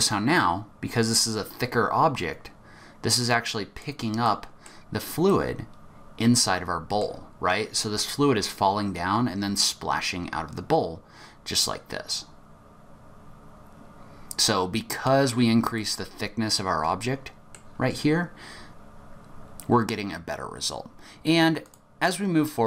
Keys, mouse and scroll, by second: 4.2 middle click, 5.2 middle click, 8.1 click, 15.7 middle click, 21.7 click.